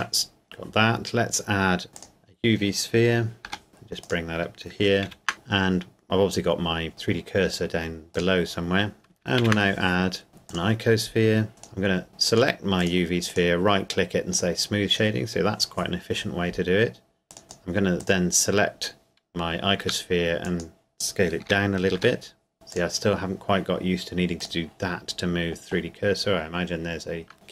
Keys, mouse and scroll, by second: 1.9 click, 3.5 g, 4.0 click, 5.1 shift+a, 6.9 click, 9.4 shift+a, 10.5 click, 11.5 right click, 12.3 click, 13.3 right click, 14.3 click, 17.3 right click, 17.5 click, 19.8 s, 20.4 click, 21.5-22.0 typing, 22.5 click.